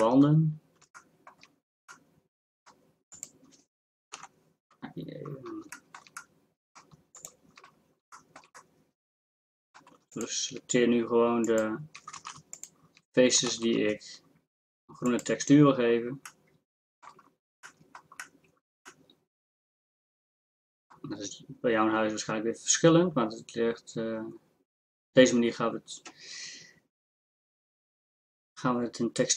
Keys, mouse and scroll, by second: 1.7 middle click, 2.1 middle click, 2.4 middle click, 4.1 ctrl+KP_Add, 12.2 ctrl+z, 13.5 ctrl+z.